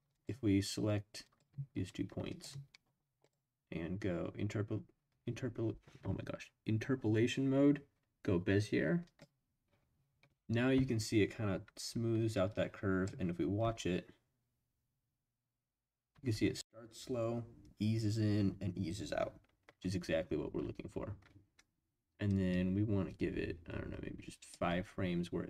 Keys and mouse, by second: 0.1 click, 1.2 drag, 2.3 shift+click, 3.2-9.2 drag, 12.5-13.0 drag, 13.6 space, 16.1 space, 22.3-24.5 drag.